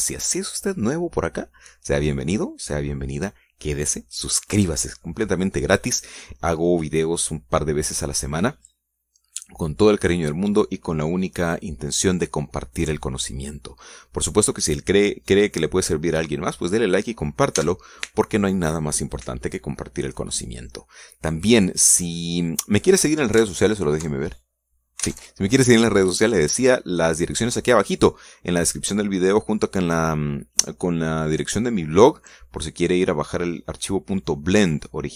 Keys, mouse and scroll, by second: 18.9 n, 24.7 alt+Tab, 26.4 alt+Tab.